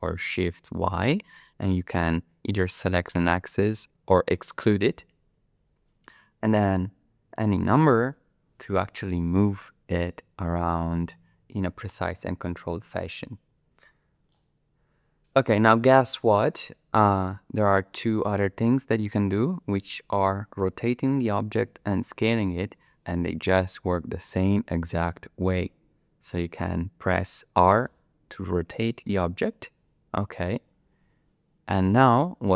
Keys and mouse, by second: 0.7 shift+y, 7.4 KP_1, 7.6 KP_5, 8.0 KP_0, 14.3 click, 27.9 r.